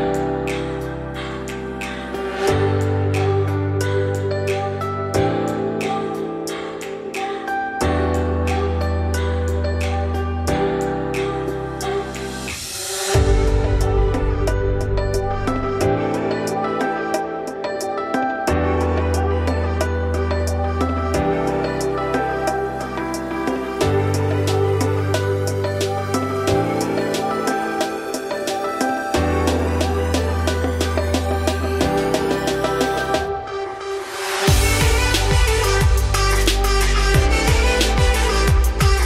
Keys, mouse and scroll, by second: 0.1 alt+shift+click, 1.0 ctrl+z, 1.6 alt+shift+click, 2.4 alt+shift+click, 3.8 alt+shift+click, 4.3 `, 4.7-5.0 scroll up 3, 5.0 shift+middle click, 5.3-6.0 scroll up 3, 6.0 ctrl+b, 8.5 scroll down 4, 8.7-10.1 middle drag, 10.1 click, 11.3 3, 11.4 click, 11.8-13.0 middle drag, 13.0 shift+click, 13.7 f, 14.7 F3, 18.8 middle click, 19.4 click, 19.6-20.8 middle drag, 20.8 shift+click, 21.9 ctrl+e, 22.9 ctrl+e, 24.0 middle click, 24.5 F3, 26.9 middle click, 27.7-28.1 scroll down 1, 28.1 click, 28.3 scroll down 4, 28.5-29.7 middle drag, 29.7-30.2 scroll up 4, 30.2-30.7 middle drag, 30.7 click, 31.0 shift+middle drag, 31.3-31.7 scroll up 1, 31.7 Tab, 31.9 scroll down 2, 32.1 a, 32.5-34.0 middle drag, 34.0 g, 37.7-39.0 scroll up 2.